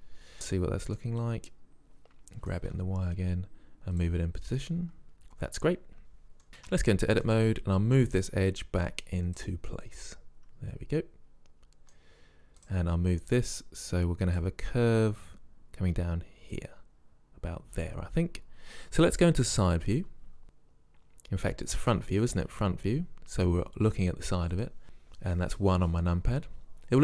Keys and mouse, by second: 0.9 click, 2.5 g, 6.1-6.6 middle drag, 6.6-7.7 drag, 6.7 Tab, 9.3 click, 10.3 click, 10.5-11.7 middle drag, 12.7 click, 14.4-15.4 drag, 16.7-18.6 drag, 20.4 KP_3, 22.0 KP_1.